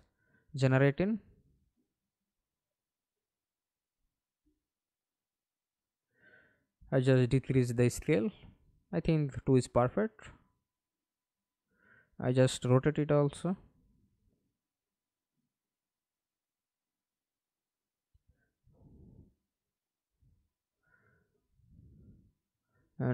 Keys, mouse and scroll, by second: 1.4 Escape, 3.5 F11, 6.4 2, 6.9 Return, 8.7 scroll down 2, 9.1 alt+click, 10.1 e, 13.4 F11, 13.9 alt+p, 16.3 1, 17.4-20.1 typing, 21.9 s, 22.2 d, 22.9 Escape.